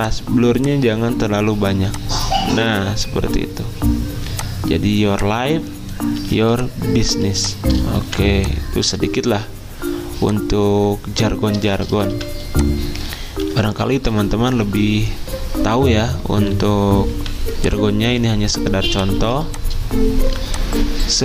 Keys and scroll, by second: 6.2 z, 7.3 v, 12.1 v, 13.4 alt+Down, 13.6 alt+Down, 17.1 v, 19.2 z, 20.4 ctrl+z.